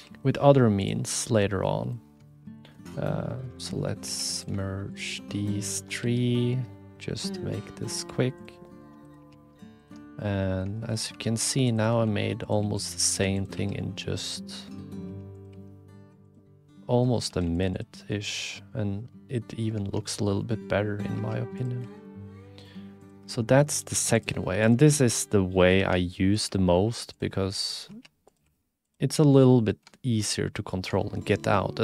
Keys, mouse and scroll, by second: 0.0 g, 1.3 click, 2.4 click, 3.3 click, 3.5 alt+z, 3.7 click, 4.0 1, 6.0 f, 6.4 click, 7.5 1, 7.9 click, 8.0 g, 8.6 middle click, 8.7 click, 9.0 click, 9.2 2, 9.7 alt+shift+click, 10.4 click, 10.7 shift+click, 11.1 e, 11.9 r, 12.4 click, 12.6 g, 13.1 ctrl+r, 14.5 click, 15.0 2, 15.4 click, 15.5 g, 16.6 click, 17.4 ctrl+r, 18.3 click, 19.4 click, 21.1 2, 21.8 g, 23.4 click, 23.8 1, 24.1 click, 24.5 g, 25.2 click, 26.3 2, 26.8 g, 27.4 click, 27.9 2, 28.4 g, 29.7 click, 30.0 shift+click, 30.4 click, 31.0 shift+click.